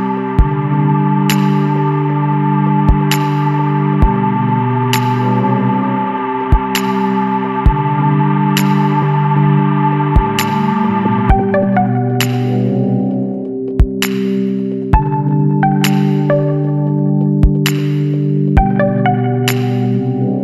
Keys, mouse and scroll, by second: 0.2 KP_1, 0.4 KP_2, 0.6 KP_Decimal, 0.9 KP_5, 2.9 click, 4.7 click, 5.4 click, 6.5 ctrl+v, 8.3 click, 9.4 click, 10.6 click, 13.9 click, 14.9 KP_2, 15.1 KP_4, 16.9 click, 18.0 KP_1, 18.3 KP_3, 20.0 click.